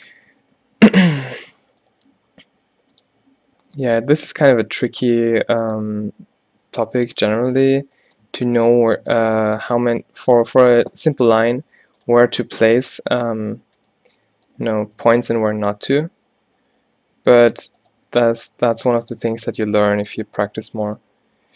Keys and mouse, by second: 1.9 click, 2.2 e, 3.2 e, 6.0 e, 7.3 middle click, 7.9 Tab, 8.2 Tab, 9.3 g, 10.5 middle click, 13.1 middle click, 15.9 g, 17.4 click, 18.5 g, 19.5 g, 21.1 g.